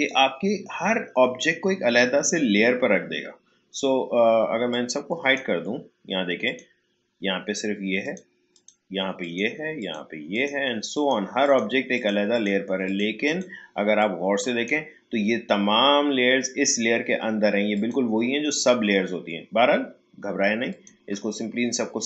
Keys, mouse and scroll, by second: 4.7-17.2 drag, 17.7 click, 20.7 shift+click.